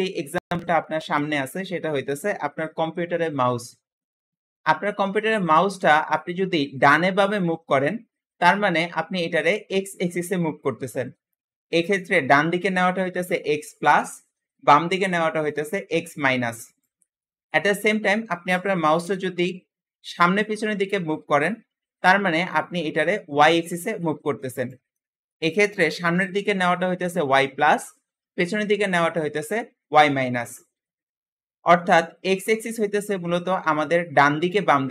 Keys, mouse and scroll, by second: 4.2-4.6 scroll up 1, 4.6 shift+middle click, 5.2 g, 17.1-18.8 middle drag, 18.8 g, 24.8 shift+middle click, 25.6 g, 30.7-31.9 middle drag, 31.9-34.1 scroll down 1.